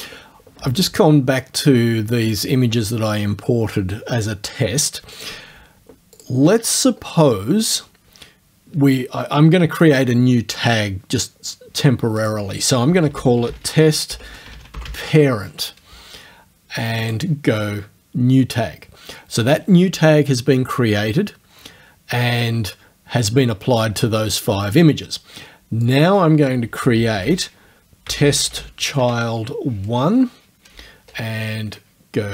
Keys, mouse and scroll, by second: 5.2 click, 6.2 shift+click, 12.2 click, 12.8-15.4 typing, 17.1 click, 25.8 click, 26.6-29.5 typing.